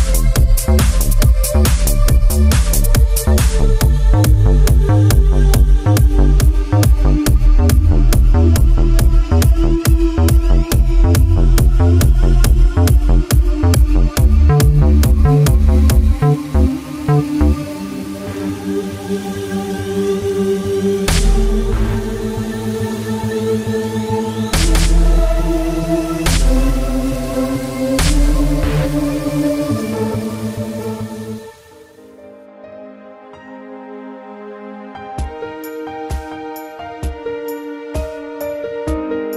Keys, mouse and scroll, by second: 1.7 x, 2.4 click, 2.9 middle click, 3.2 scroll up 2, 3.6 shift+middle click, 3.7 middle click, 3.8 Tab, 5.3 click, 6.2 click, 7.6 click, 9.0 click, 10.7 click, 12.1 click, 12.8 shift+middle click, 13.5 7, 14.3 shift+middle click, 18.0 shift+middle click, 18.6 Tab, 19.9 ctrl+r, 21.0 click, 29.7 7, 32.9 Return, 34.0 ctrl+r, 34.5 click, 36.5 typing.